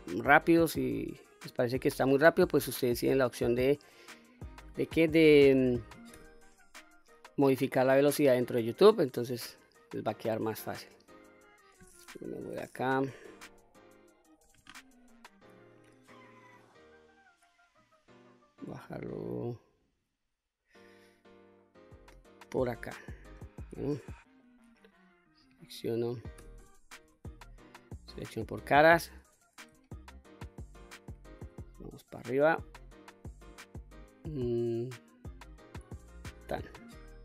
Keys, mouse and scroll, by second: 0.5-2.2 drag, 2.9 middle click, 3.9 middle click, 4.9 3, 6.1 q, 6.6 click, 7.3-11.7 middle drag, 12.2 KP_3, 13.0 q, 14.6 1, 14.9 click, 16.4-22.4 drag, 23.0-23.4 scroll down 1, 23.4-24.4 middle drag, 24.6 click, 26.4 q, 26.6 a, 27.0 3, 27.6 click, 30.1 shift+click, 31.4 e, 36.0 click, 36.5-37.2 middle drag.